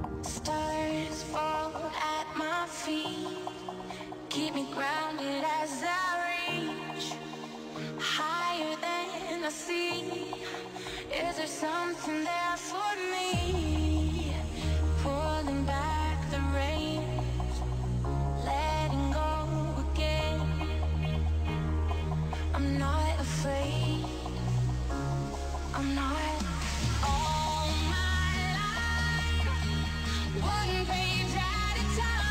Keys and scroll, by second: 1.2 5, 1.6 2, 3.2 space, 9.4 t, 12.8 space.